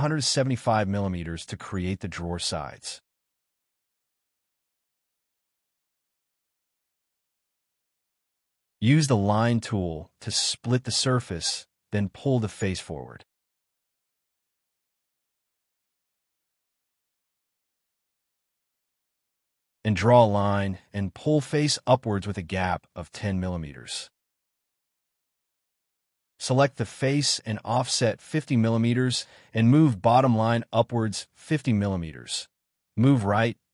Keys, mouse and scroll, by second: 0.1 middle click, 0.9 scroll up 1, 3.3-5.2 typing, 4.3 scroll down 1, 4.6 middle click, 5.5 middle click, 7.9 y, 8.1 scroll up 1, 10.4 shift+middle click, 12.2 p, 14.2 1, 14.5 8, 14.7 Return, 15.1 scroll up 1, 15.2 e, 15.6 scroll down 1, 16.4 scroll up 1, 17.3 l, 19.3 scroll down 1, 19.8 p, 23.2-24.1 typing, 23.9 scroll down 1, 24.1 middle click, 26.5 space, 28.4-30.1 typing, 29.2 middle click, 29.5 scroll up 1, 30.5 Up.